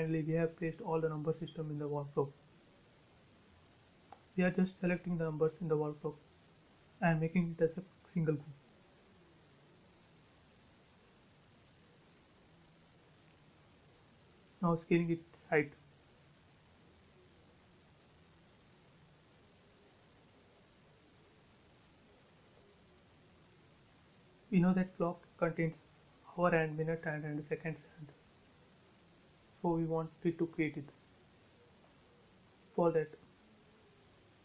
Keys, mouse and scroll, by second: 0.7 middle click, 1.6-4.0 drag, 6.3-6.8 scroll up 1, 7.7 right click, 8.8 click, 10.3 scroll down 1, 10.3-12.1 middle drag, 12.1 scroll up 1, 12.5 s, 13.6 click, 15.7-16.3 typing, 15.9 Return, 17.9-18.2 scroll down 1, 19.0 middle click, 19.6-20.1 scroll down 1, 20.1 middle click, 20.8 scroll up 1, 21.1 shift+middle click, 22.9-23.5 scroll down 1, 25.2-28.5 shift+middle drag, 28.5 scroll up 1, 29.4 middle click, 29.7 scroll down 1, 30.9 shift+e, 31.2 space, 31.8 ctrl+z, 32.2 space, 32.5-33.3 scroll up 1, 33.3-33.8 scroll down 1, 33.8-34.2 scroll up 1.